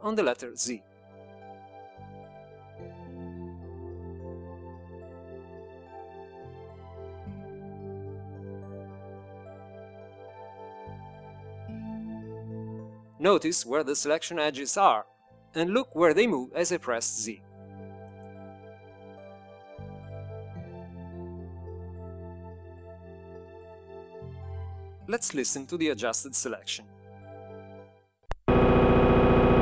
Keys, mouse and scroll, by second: 11.8 click, 20.1 z, 28.2 shift+click.